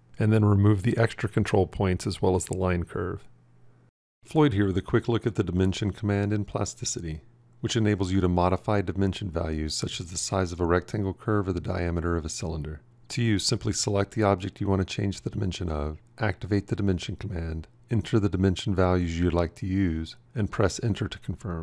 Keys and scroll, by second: 16.1 f.